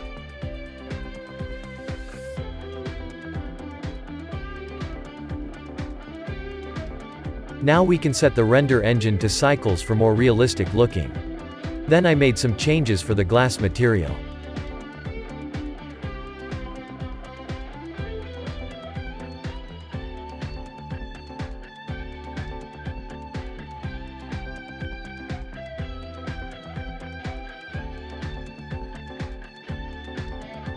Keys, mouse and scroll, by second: 0.7-2.8 shift+middle drag, 2.8-3.6 scroll up 1, 3.6-5.4 scroll up 1, 5.4-6.0 scroll up 1, 6.0-9.6 scroll up 1, 9.6 click, 15.3-16.0 drag, 16.7-18.2 middle drag, 18.2 click, 19.7-22.4 middle drag, 22.4-24.0 drag, 24.3-25.6 drag, 25.6 middle click, 26.2 click, 30.2-30.7 shift+middle drag.